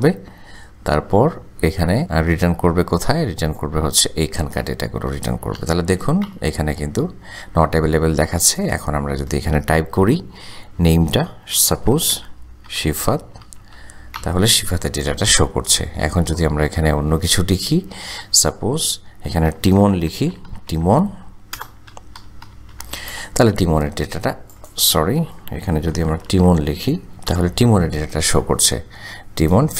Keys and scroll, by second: 0.9 ,, 6.0 shift+0, 6.3 shift+Return, 12.0-14.2 typing, 20.0-23.1 typing, 24.2 typing, 26.2 shift+t, 27.3 Return.